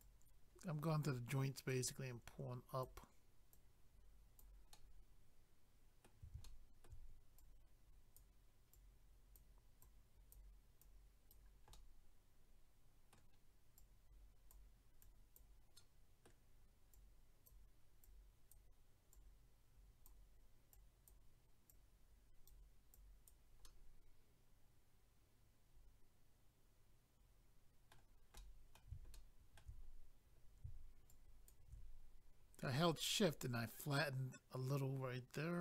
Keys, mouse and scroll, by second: 0.0 click, 0.7 click, 1.7 click, 2.4 click, 3.5 click, 6.4 shift+middle click, 7.4 click, 8.7 click, 9.8 click, 10.8 click, 11.7 middle click, 13.7 click, 15.0 click, 15.8 middle click, 16.9 click, 18.0 click, 20.7 click, 21.7 click, 22.9 click, 23.6 middle click, 28.3 middle click, 29.1 shift+middle click, 29.9-30.4 scroll up 1, 31.1 shift+click, 32.0 scroll down 1, 33.2 middle click.